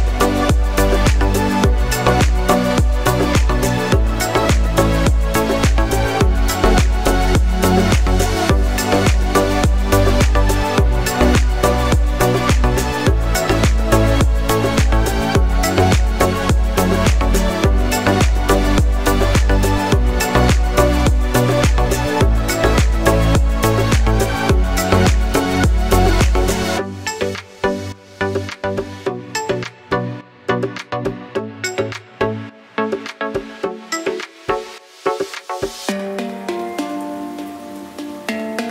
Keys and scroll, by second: 0.6 Tab, 6.6 s, 10.6 Tab, 13.6 Tab, 15.1 s, 16.3 Tab, 20.0 Tab, 27.6 Tab.